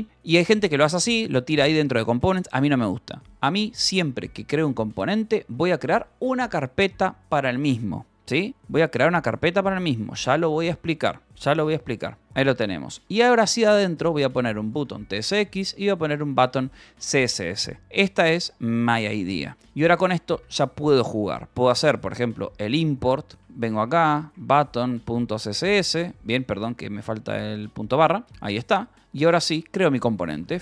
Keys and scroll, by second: 1.2 :, 1.8 Return, 3.3 o, 4.4-6.0 typing, 6.5 Return, 7.1 Escape, 7.3 Return, 7.6 y, 8.1 Escape, 8.5 k, 10.0 l, 10.5 h, 11.2 d, 11.3 Escape, 12.2 Return, 13.0-17.8 typing, 17.6 Return, 20.3-30.6 typing, 20.5 Return, 29.3 Return.